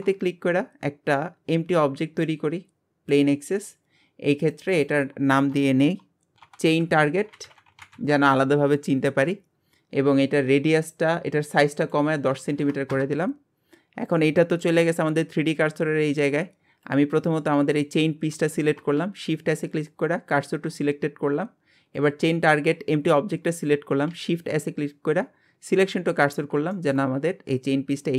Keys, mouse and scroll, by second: 3.7 scroll down 2, 4.6 click, 4.7-6.5 drag, 10.7 click, 11.8-13.6 drag, 13.6 scroll down 2, 14.4-15.3 middle drag, 15.3-16.0 scroll up 1, 16.1-16.9 scroll up 3, 16.9 click, 19.0 shift+s, 22.0 click, 22.7 scroll down 1, 24.1 shift+s, 26.3 scroll up 3, 26.7-27.1 shift+middle drag.